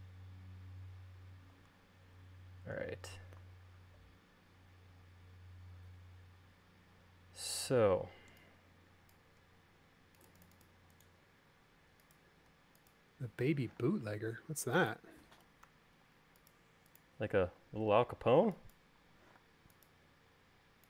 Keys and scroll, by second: 13.8 q, 15.8 Left, 16.2 Right, 19.5 m.